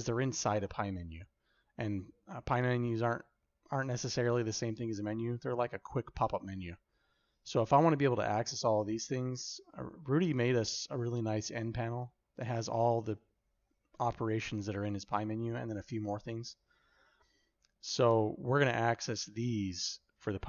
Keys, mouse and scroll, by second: 11.8 n.